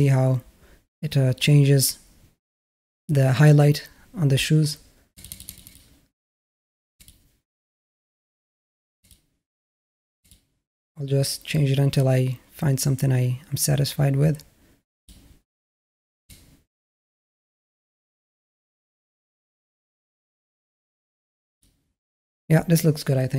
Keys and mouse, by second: 5.0 click, 11.9 click, 16.2 click.